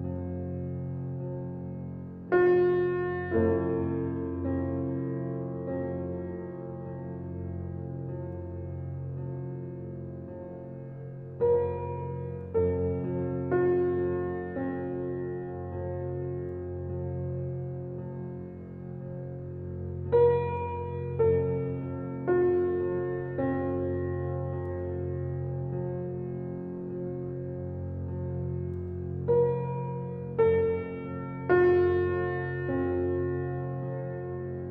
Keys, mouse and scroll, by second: 0.1 scroll down 1, 0.4-1.5 middle drag, 1.5 click, 3.2-4.1 drag, 4.1 s, 6.8-7.1 drag, 7.1 Tab, 7.9 g, 10.0 Tab, 10.4 click, 11.9 ctrl+j, 12.4 click, 12.7 scroll down 2, 13.0-14.5 alt+middle drag, 14.5 shift+g, 14.6 shift+g, 15.8 shift+d, 18.8 s, 20.3-21.2 middle drag, 21.2 scroll up 1, 21.2 alt+middle click, 21.8 scroll up 3, 22.1 shift+middle click, 22.9 g, 25.6-26.0 drag, 26.0 scroll up 2, 26.2 click, 26.8 click, 27.9 x, 28.9 click, 29.3-29.6 scroll up 1, 29.6-29.9 alt+middle drag, 29.9 scroll up 2, 30.1-31.5 shift+middle drag, 31.5 shift+d.